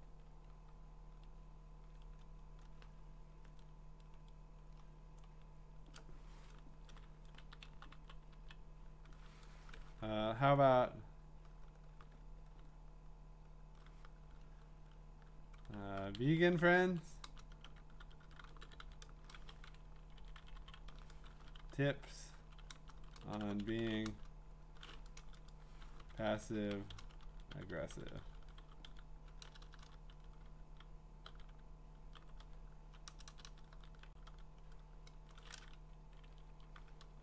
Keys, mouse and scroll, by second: 2.0-3.6 scroll up 13, 3.6 scroll down 3, 4.0-4.7 scroll, 5.2-6.3 scroll, 6.8 Right, 7.4 Down, 7.7 Down, 7.9 Down, 8.4 Down, 15.6-19.7 typing, 19.9 Down, 20.2 Down, 20.4 Down, 20.5 Down, 20.7 Down, 21.1-24.4 typing, 25.8-30.2 typing, 33.1-34.8 typing, 36.0 Down, 36.3 Down, 36.4 Down, 37.1 BackSpace.